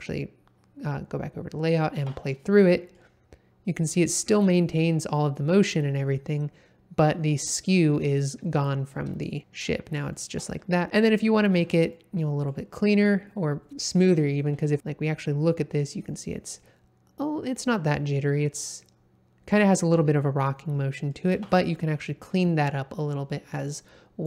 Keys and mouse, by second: 1.9 space, 2.4-2.9 middle drag, 8.5 middle click, 9.2 shift+middle drag, 10.1 shift+middle drag, 11.5 space, 11.9 middle click, 12.1 click, 14.8 space, 15.8-16.5 drag, 20.4-21.1 drag, 21.3 space.